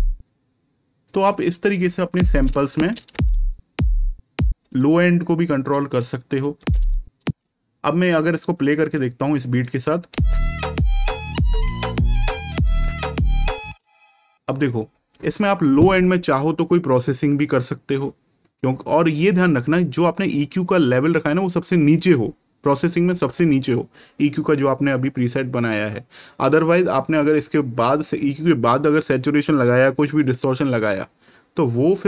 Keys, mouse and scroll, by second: 2.7 space, 4.7 click, 6.5 space, 8.5 right click, 10.0 space, 11.8-12.2 ctrl+scroll down 1, 13.5 scroll down 1, 14.4 click, 20.3 click.